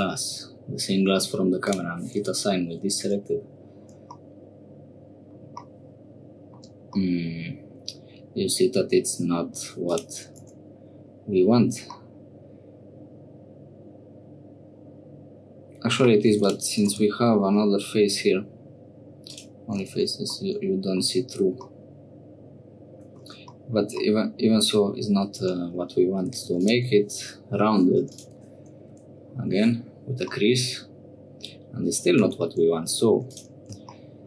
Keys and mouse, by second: 1.6 click, 3.1 Tab, 4.2-5.3 drag, 6.2 shift+middle click, 7.0-9.5 middle drag, 9.8 click, 10.5 Tab, 11.9-15.9 middle drag, 16.3 3, 16.4 click, 16.8 x, 20.0 Tab, 20.4 middle click, 21.6-23.2 middle drag, 24.0 middle click, 25.4 Tab, 26.3 2, 26.4 3, 26.5 click, 28.1-29.6 drag, 29.5 Tab, 30.3-32.0 middle drag, 32.2 Tab, 33.1 3, 33.3 click.